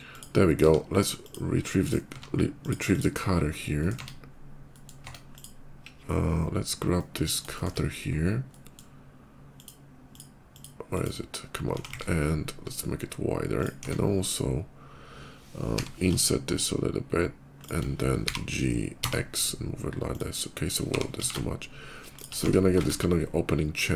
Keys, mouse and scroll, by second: 0.3 q, 1.0 click, 1.7 right click, 2.4 click, 2.8 click, 3.3 scroll down 1, 3.5 middle click, 3.8 Tab, 4.5 middle click, 5.0 click, 6.0 /, 6.4 scroll down 1, 6.6 middle click, 7.3 shift+middle click, 8.1 shift+middle click, 9.3 shift+click, 9.8 shift+click, 10.4 click, 10.6 click, 11.6 s, 11.7 x, 11.8 s, 13.4 click, 13.6 Tab, 14.0 click, 15.5 i, 17.4 click, 17.4 shift+i, 17.9 g, 18.8 x, 19.9 click, 20.7 g, 20.8 x, 21.4 g, 22.0 shift+click, 22.2 Tab, 22.6 shift+2, 23.6 middle click.